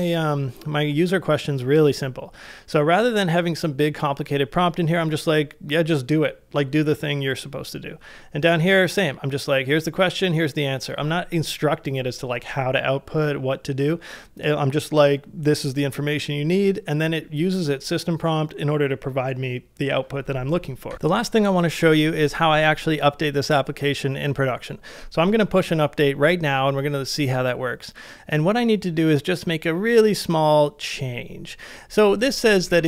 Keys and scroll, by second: 20.9 j, 32.2-32.8 typing.